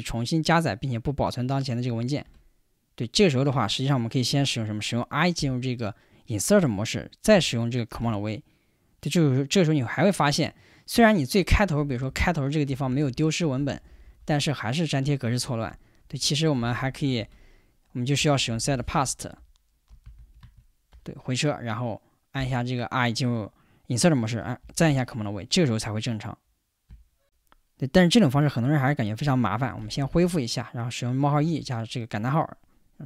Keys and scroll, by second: 2.2 Return, 5.3 i, 7.9 super+v, 11.4 Escape, 12.0-14.8 typing, 16.4-20.6 typing, 20.9 Return, 22.4 i, 24.8 super+v, 27.2 shift+super+@, 29.6-31.4 typing.